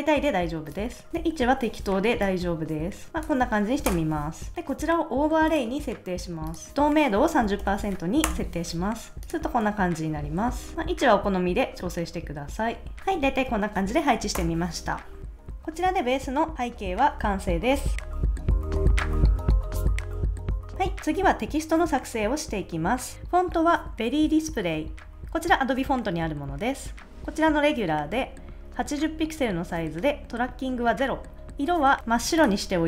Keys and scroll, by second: 3.9 Return, 7.2-8.1 typing, 8.2 Return, 9.6 super+s, 14.4 Return.